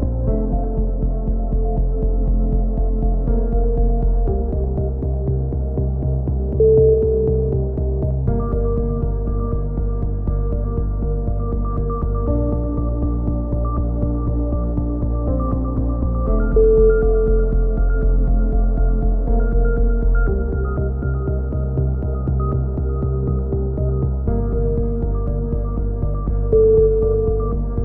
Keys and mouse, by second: 0.5 z, 0.8 click, 5.8 KP_3, 6.0 z, 6.8 e, 7.3-10.1 drag, 10.1-11.1 right drag, 10.1 s, 12.4 a, 12.5 z, 12.8-13.3 drag, 13.9 right click, 13.9 z, 14.5 z, 18.3 a, 18.6-19.0 drag, 19.0 z, 19.6 ctrl+l, 20.2 KP_7, 23.3 KP_3, 24.3-25.5 middle drag, 25.2 KP_7, 26.0-27.8 drag.